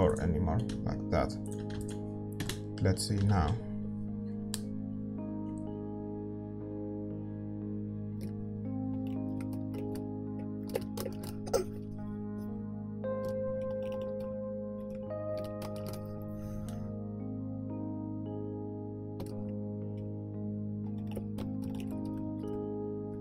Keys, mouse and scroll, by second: 2.5 ctrl+s, 2.5 g, 2.5 KP_0, 8.3 click, 8.8-18.5 middle drag, 8.8 shift+z, 19.4 shift+z, 19.9-23.2 middle drag.